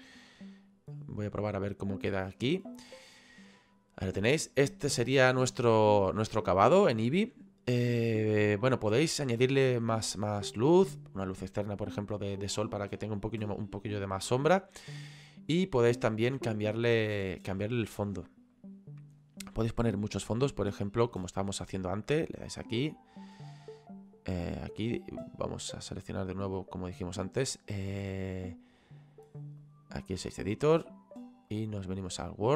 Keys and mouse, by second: 4.5 click, 18.3 click, 21.8 click, 23.9 click, 26.1 click, 29.7 click, 31.6 click.